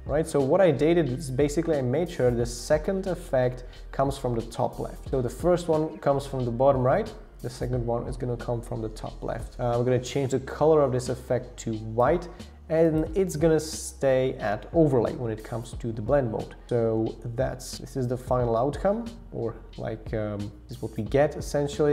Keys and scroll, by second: 0.1 Down, 16.7 shift+Up, 17.0 shift+Down, 17.6 shift+Up, 17.6 shift+Down, 17.7 shift+Down, 18.9 Down, 19.3 Up, 19.3 Return.